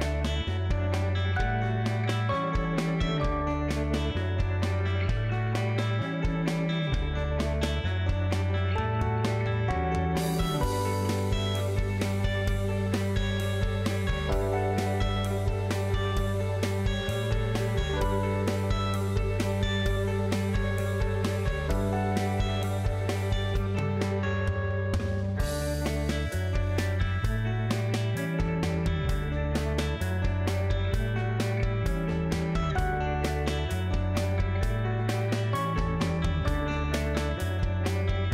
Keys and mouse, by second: 0.2 alt+z, 3.3-4.9 ctrl+drag, 5.9 ctrl+z, 7.0 middle click, 8.1 middle click, 9.2 alt+z, 9.6 middle click, 11.4-12.4 middle drag, 13.1 shift+click, 14.9 ctrl+z, 15.5 ctrl+click, 16.6 ctrl+click, 17.2-18.5 drag, 19.3 x, 21.0 Tab, 21.4 click, 22.0 Tab, 22.5 click, 24.5 middle click, 25.7 alt+click, 27.7 KP_3, 28.0 alt+z, 30.3 middle click, 31.5 alt+z, 32.4 middle click, 33.5 ctrl+click, 34.3 middle click, 35.2-36.3 ctrl+drag, 36.5 middle click, 37.7 ctrl+click.